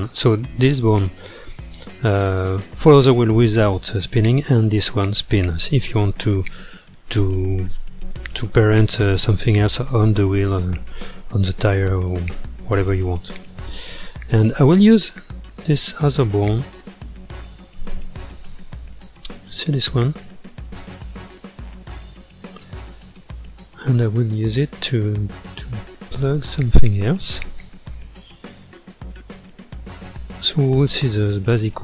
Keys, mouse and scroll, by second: 0.2 scroll up 1, 0.7 click, 1.4 ctrl+Tab, 1.6 click, 4.9 click, 15.5 click, 16.6-17.5 middle drag, 17.5 scroll down 1, 18.5 KP_7, 19.5-19.8 scroll down 4, 19.8-21.4 shift+middle drag, 21.4 click, 23.7 click, 25.2-26.3 middle drag, 26.3-26.9 scroll up 1, 26.9-27.9 shift+middle drag, 27.9 KP_1, 29.1 ctrl+KP_3, 31.1 g.